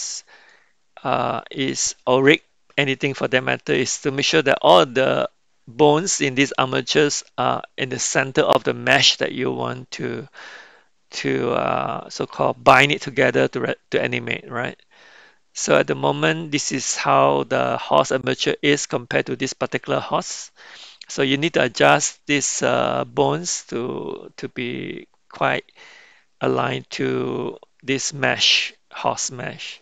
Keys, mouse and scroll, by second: 0.4-2.8 middle drag, 11.2-12.2 middle drag, 14.2-15.8 middle drag, 23.3-25.4 middle drag.